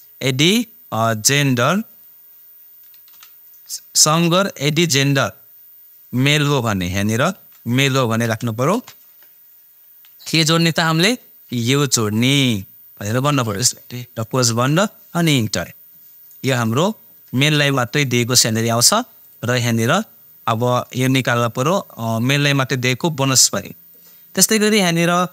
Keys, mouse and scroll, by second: 1.0-3.1 drag, 3.1 ,, 6.9 ', 8.3 shift+m, 8.7 shift+', 10.2 ,, 12.1-14.5 drag, 14.5 shift+0, 19.2 click, 23.9 click.